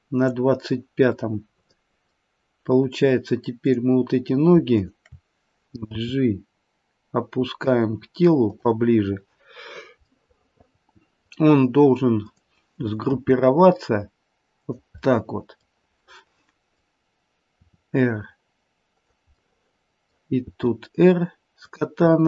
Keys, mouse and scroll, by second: 1.3 middle click, 1.4 middle click, 1.6 middle click, 3.6 click, 4.7 shift+click, 6.0 g, 9.9 scroll down 2, 10.0 middle click, 12.1 click, 13.0 g, 14.9 middle click, 16.0 middle click, 17.5 r, 19.4 middle click, 20.4 r, 22.1 middle click.